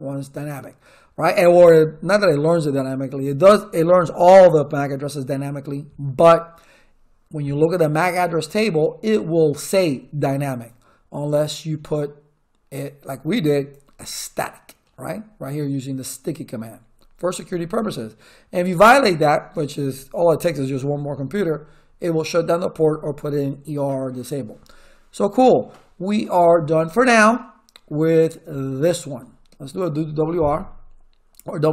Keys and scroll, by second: 31.4-31.7 typing.